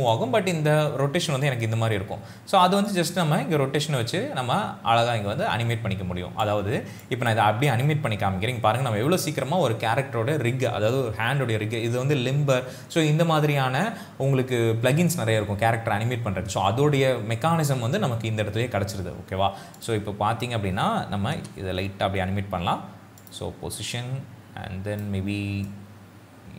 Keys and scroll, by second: 21.4 p.